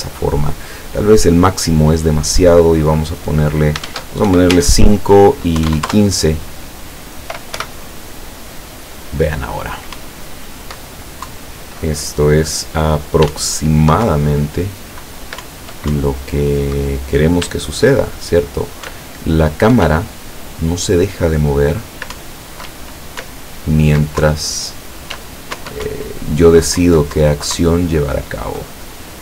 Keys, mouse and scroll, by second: 1.1 click, 3.9 shift+Tab, 4.3 shift+KP_5, 4.6 shift+Tab, 5.6 KP_1, 5.7 KP_5, 5.9 KP_Enter, 7.6 p, 10.0 Up, 13.3 w, 13.4 Up, 14.1 Down, 15.5 Up, 17.5 w, 19.0 Up, 19.9 w, 22.2 Up, 22.7 w, 23.3 Up, 24.3 Down, 25.2 w, 25.6 Up, 26.9 Down, 27.6 Up.